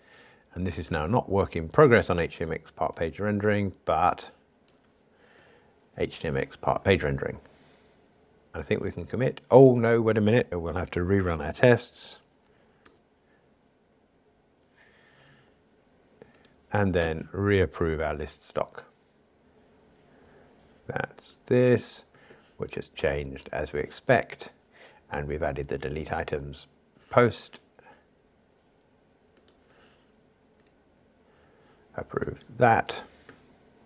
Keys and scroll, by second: 12.4 ctrl+alt+r, 32.8 super+F11.